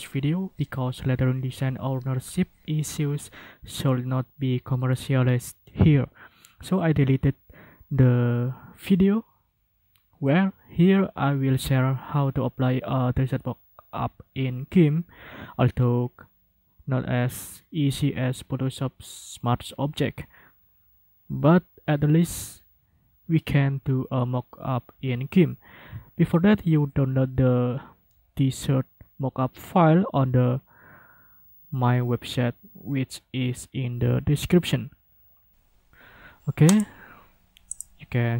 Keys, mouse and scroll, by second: 3.4 ctrl+r, 14.4 ctrl+r, 25.4 ctrl+r, 36.7 click, 37.7 click.